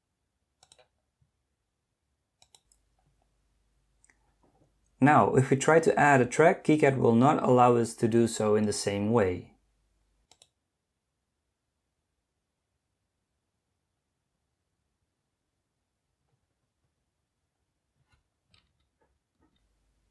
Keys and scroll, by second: 19.4 Escape.